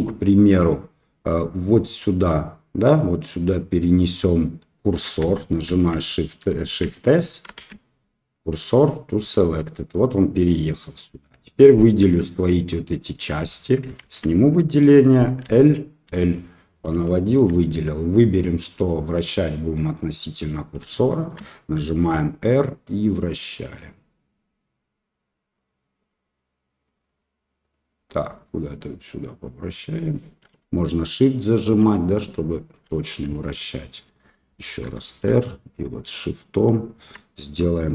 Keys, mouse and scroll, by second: 1.6 click, 5.6 shift+s, 6.6 shift+s, 7.6 shift+s, 14.0 alt+a, 15.4 l, 16.0 l, 17.1 shift+click, 18.8-20.1 drag, 21.0 shift+middle click, 21.8 r, 32.9 shift+click, 34.8 r.